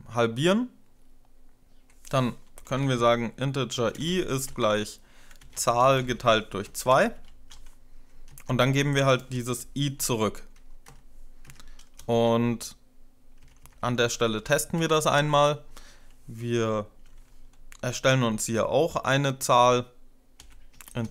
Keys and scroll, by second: 2.1-7.6 typing, 8.2 Down, 8.5 Left, 9.0 BackSpace, 10.0-10.7 typing, 11.4 Right, 11.8 typing, 12.0 shift+Up, 13.2 Up, 13.5 Up, 13.8 Up, 14.1 Up, 18.2 Up, 18.3 i, 19.9-21.1 typing.